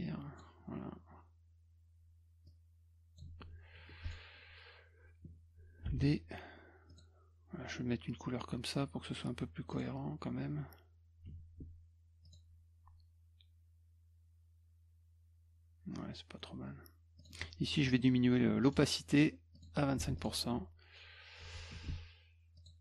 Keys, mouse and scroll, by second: 2.5 click, 4.0 click, 5.9 d, 6.9 click, 9.7 click, 11.2 F2, 12.2 click, 17.2 click, 18.6 right click, 19.5 click, 20.0 F1, 20.2 click, 22.6 click.